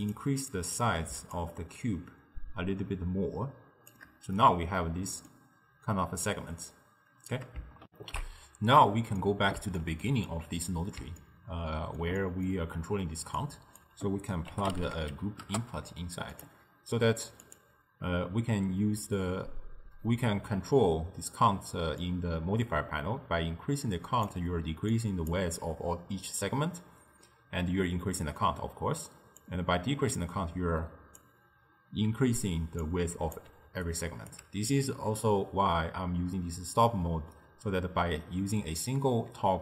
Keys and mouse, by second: 0.1 click, 0.5 click, 1.4-4.4 shift+drag, 4.4-7.4 middle drag, 7.9 n, 9.2-13.5 middle drag, 13.5 click, 17.5 click, 22.0-24.7 drag, 24.7 d, 25.0-25.4 drag, 25.4 d, 27.0 d, 29.4-32.2 drag, 32.2-34.4 typing, 32.9-33.4 drag, 33.9 right click, 34.8-37.8 middle drag.